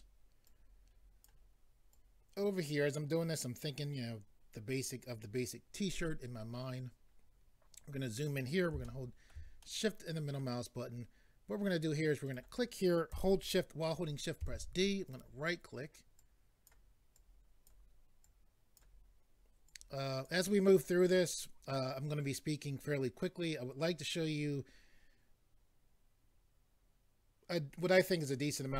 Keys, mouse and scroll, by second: 0.4 click, 1.9 click, 7.2-7.9 scroll up 2, 7.9-8.4 scroll up 1, 8.8 shift+middle click, 9.6 middle click, 12.3 click, 15.1 right click, 16.2 click, 17.2 click, 18.2 click, 19.7 click.